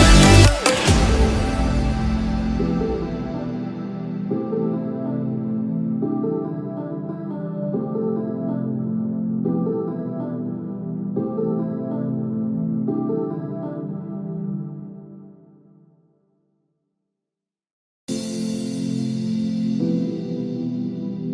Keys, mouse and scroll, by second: 8.2-8.6 scroll down 1, 8.6 shift+middle click, 11.0 shift+d, 18.7 shift+d.